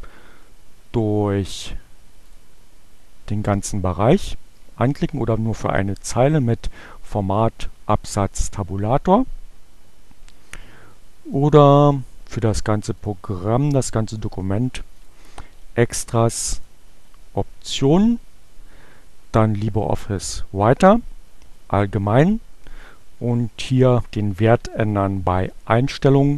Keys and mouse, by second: 1.6-2.6 drag, 6.5 click, 11.0 click, 13.0 click, 15.0 click, 16.4 click.